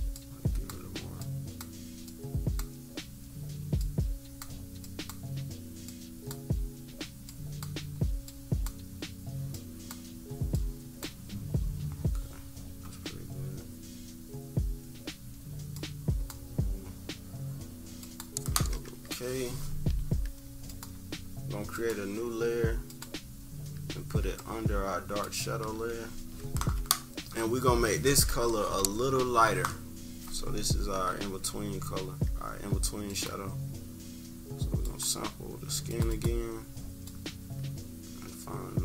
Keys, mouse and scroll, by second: 0.1 click, 1.5 click, 3.7 click, 5.0-5.8 drag, 6.2-8.0 drag, 8.2-13.3 drag, 15.7 click, 17.9 click, 19.3 -, 20.0 scroll down 1, 20.6-21.8 drag, 22.8 click, 24.3 click, 25.6 =, 25.9 =, 26.0 scroll up 2, 31.1-31.4 scroll down 2, 31.6 =, 33.0-35.0 drag, 35.8 click, 37.0-38.7 drag.